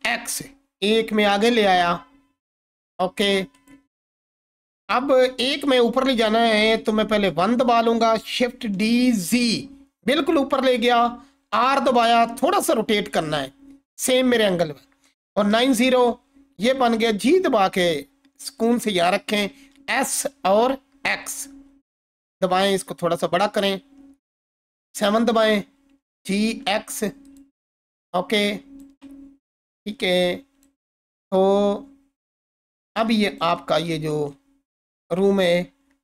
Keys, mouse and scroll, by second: 0.0 x, 3.5 click, 4.2-6.1 scroll down 1, 7.3 1, 8.6 shift+d, 9.3 z, 10.5 click, 11.3 r, 15.1-16.8 typing, 15.9 click, 18.6 click, 19.5 s, 23.3 click, 24.8 7, 25.9 g, 26.4 x, 27.2 click, 28.2-28.8 alt+drag, 29.2-29.7 scroll up 2, 30.1-30.7 alt+drag, 33.0-33.6 shift+click, 33.6-34.2 scroll up 1, 34.6-34.9 alt+drag.